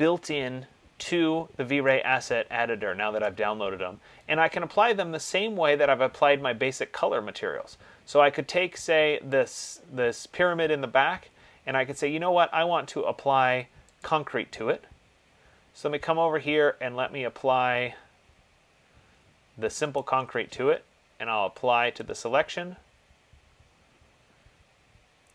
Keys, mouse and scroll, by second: 3.4 click, 5.5 click, 9.7 click, 14.2 click, 17.2 middle click, 17.3 middle click, 18.0 middle click, 20.2 right click, 22.4 click.